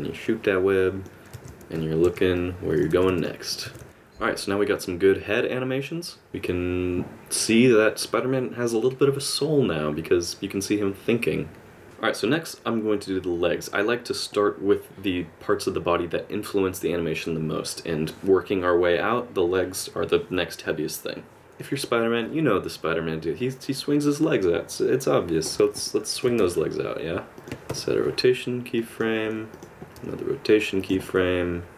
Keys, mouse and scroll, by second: 1.3 alt+r, 2.1 alt+g, 2.4 middle click, 2.9 r, 3.7 r, 11.8 space, 21.4 middle click, 25.9 middle click, 26.4 r, 27.5 middle click, 27.7 i, 29.5 click, 30.0 r, 31.0 middle click.